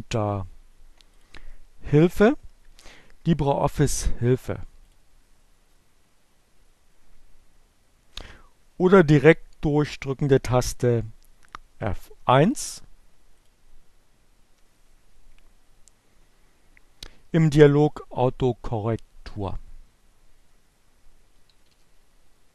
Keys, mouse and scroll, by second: 0.5 click, 4.3 click, 6.3-7.6 drag, 10.2 F1, 12.9 click, 13.5 F1, 20.0-21.6 typing.